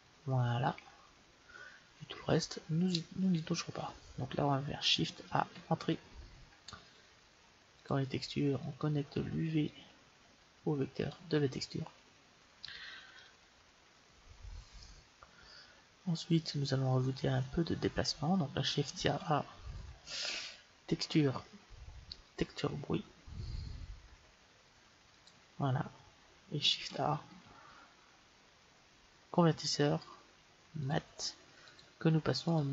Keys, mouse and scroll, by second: 5.1 shift+a, 9.6-11.6 drag, 13.0 middle click, 18.8 shift+a, 27.0 shift+a, 32.4-32.7 drag.